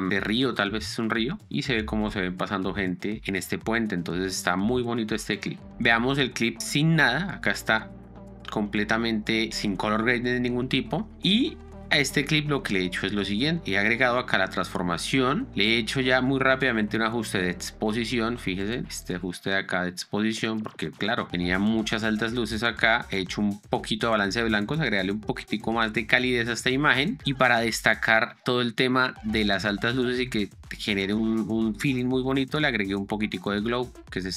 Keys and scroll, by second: 2.9 space, 5.0 space, 5.9 z, 6.7 space, 11.1 space, 14.1 ctrl+d, 17.4 d, 21.9 ctrl+d, 23.5 ctrl+d, 26.5 ctrl+d, 32.7 ctrl+d.